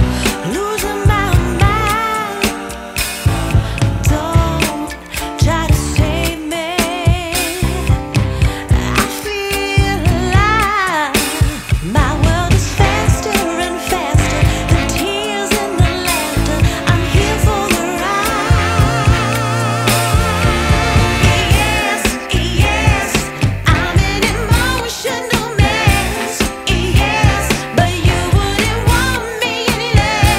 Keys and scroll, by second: 0.8 ctrl+z, 1.8 KP_Add, 4.5 c, 5.0 Escape, 6.2 KP_Add, 7.7 c, 8.0 Escape, 11.3 ctrl+Page_Down, 14.5 F4, 15.0 Escape, 27.6-30.3 typing.